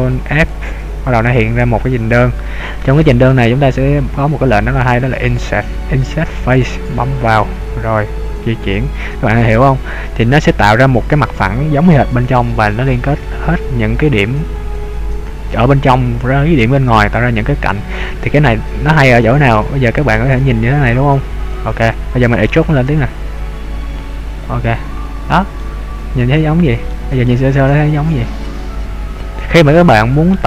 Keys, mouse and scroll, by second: 0.5 ctrl+f, 21.7 click, 23.1 e, 24.5 click, 25.6 middle click, 27.3 middle click, 29.8 middle click.